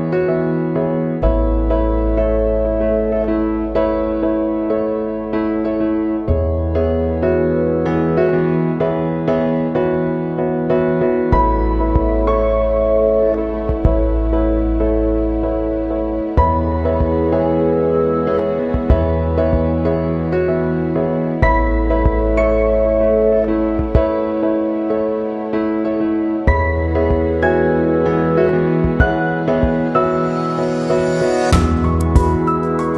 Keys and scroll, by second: 6.8 ctrl+[.